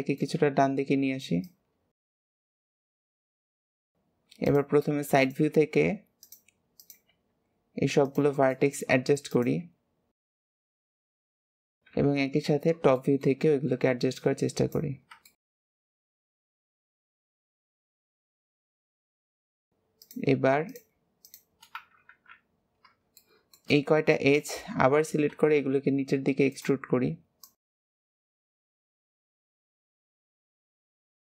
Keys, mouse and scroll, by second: 0.4-1.3 scroll up 2, 1.3 click, 2.7 KP_3, 3.3 click, 3.6 alt+z, 3.7 shift+middle click, 3.9-4.4 scroll up 2, 4.4 click, 6.7 click, 8.4 shift+middle click, 9.2 click, 9.5 g, 10.6 shift+middle click, 10.9 click, 11.8 KP_7, 12.9-14.1 shift+middle drag, 14.1 click, 14.8 scroll down 2, 15.2 shift+middle click, 15.8 click, 16.1 shift+middle click, 16.5 click, 16.6 scroll up 2, 16.9 click, 17.4 click, 17.7 click, 18.6 click, 19.0 scroll down 4, 19.1 middle click, 19.4 alt+z, 19.9 shift+click, 20.6 shift+click, 21.1 shift+click, 22.0 KP_3, 23.1-25.3 shift+middle drag, 25.3 e, 27.4 click, 28.0 shift+middle click, 28.1 scroll up 3, 28.2 alt+z, 28.4 click, 28.5 g, 29.0 click, 29.2 g, 29.6 click, 29.7 g, 30.0 click, 30.1 g, 30.6 shift+middle click, 31.0 click.